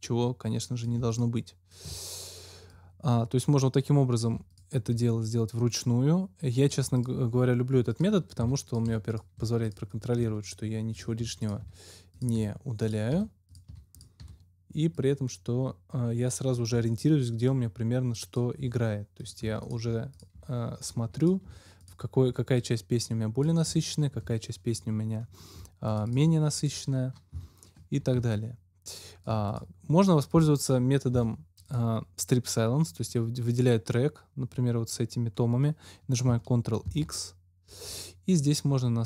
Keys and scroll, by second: 8.3 Delete, 16.6 Delete, 18.5 Delete, 23.6 Delete, 24.6 Delete, 27.3 Delete, 28.1 super+Delete, 31.0 Delete, 36.8 ctrl+x.